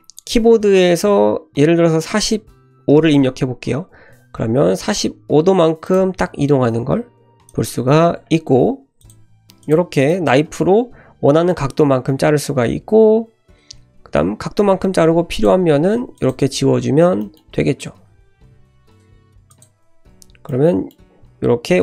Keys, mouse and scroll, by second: 9.0 click, 9.6 click, 10.1 click, 12.7-13.1 scroll down 1, 13.6-14.4 scroll up 1, 14.4-15.1 scroll up 1, 15.1 3, 15.3 click, 15.7 x, 16.5 1, 17.2 shift+middle click, 18.1 ctrl+z, 18.4 ctrl+z, 18.6 x, 19.9 1, 20.5 middle click.